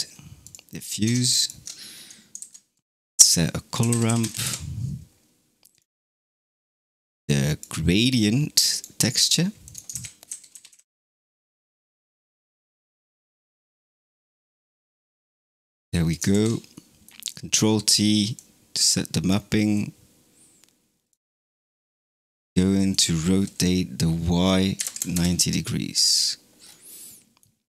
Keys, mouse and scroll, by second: 1.2-2.2 ctrl+shift+drag, 2.2 shift+a, 6.0 click, 6.9 click, 7.9 click, 8.9 middle click, 9.5 click, 9.8 shift+a, 12.9 click, 14.6-16.0 middle drag, 16.0 click, 16.2 ctrl+t, 16.7 middle click, 17.1 click, 18.2 click, 19.6 click, 21.2 middle click, 21.6-22.8 scroll up 3, 22.8-26.5 drag, 26.5-26.9 scroll up 5, 26.9-27.7 middle drag.